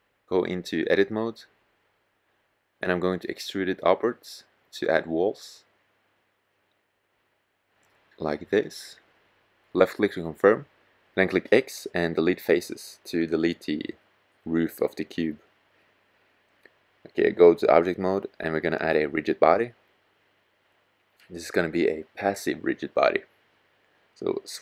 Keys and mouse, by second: 1.6 click, 2.1-5.3 middle drag, 5.3 e, 9.7-10.8 drag, 10.8 x, 11.3 click, 16.9 click.